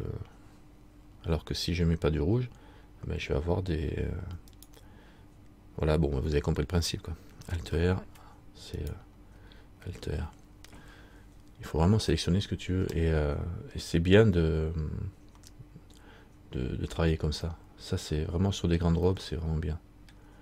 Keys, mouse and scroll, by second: 4.7 right click, 7.9 alt+r, 9.0 right click, 10.1 alt+r, 13.2 middle click, 19.3 middle click.